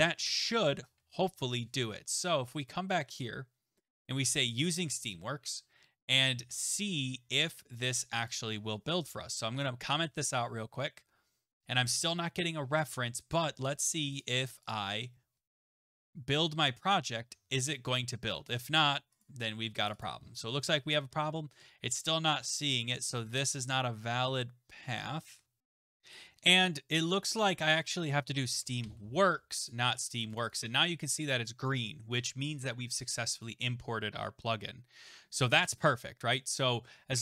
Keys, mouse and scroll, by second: 0.8 ctrl+s, 2.7 click, 5.1 click, 8.3 click, 9.1 /, 9.2 /, 10.1 ctrl+s, 14.2 click, 14.7 click, 15.9 click, 16.9 click, 19.3 click, 19.9 click, 20.0 click, 22.1 click, 25.6 click, 28.6 BackSpace, 28.8 w, 29.7 click, 30.4 click, 30.5 click, 33.4 click.